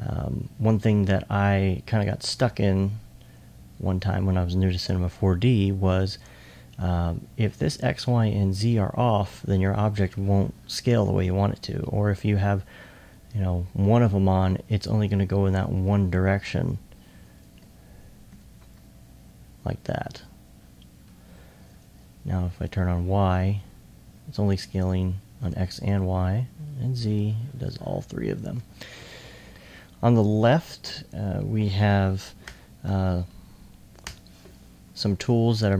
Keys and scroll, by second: 18.3 c.